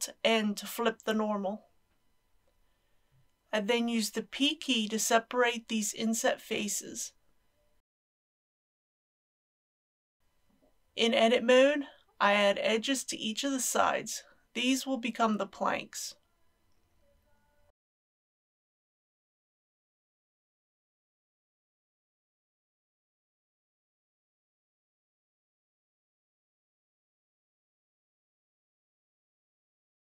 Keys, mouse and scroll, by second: 2.8 ctrl+z, 7.8 p, 9.0 click, 10.2 typing, 10.5 Return, 15.5 Tab, 16.1-17.9 drag, 20.5 Tab, 21.0 KP_1, 21.6 shift+middle click, 22.6 ctrl+r, 22.9 scroll up 1, 24.0 click, 24.4 KP_3, 24.8 ctrl+r, 24.9 scroll up 1, 25.2 click, 25.4 KP_1, 25.8 ctrl+r, 25.9-26.3 scroll up 1, 26.3 click, 26.7 KP_3, 27.1 ctrl+r, 27.2-27.7 scroll up 1, 27.7 click, 28.0 KP_7, 28.3 shift+middle click, 28.4-29.2 shift+scroll up 2, 28.6 ctrl+r, 29.3 click, 29.6 KP_1.